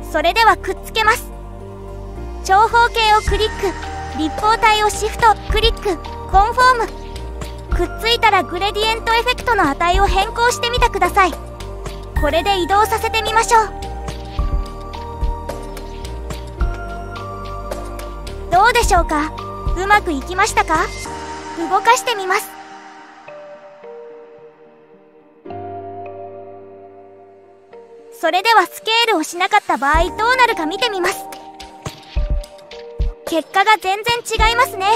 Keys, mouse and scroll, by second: 0.2 click, 1.9 shift+click, 3.3-5.9 right drag, 12.1-17.6 drag, 20.2 click, 21.3 click, 23.2 click, 23.8-26.0 drag, 27.8 click, 28.7 shift+click, 30.3-32.2 right drag.